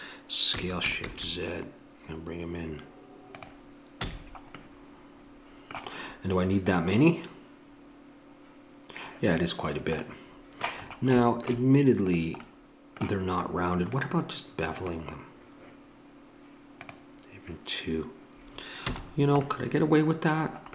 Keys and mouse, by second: 0.5 s, 4.0 a, 12.1-18.8 drag, 18.8 a.